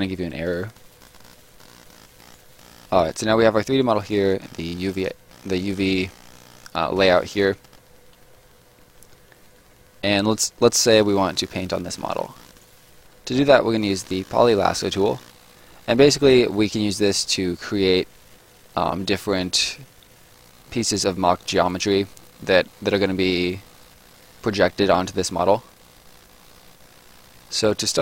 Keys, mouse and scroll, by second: 0.4 scroll up 1, 0.6 right click, 0.9 middle click, 1.5 right click, 2.5 middle click, 10.7 right click, 13.6 click, 22.5 middle click.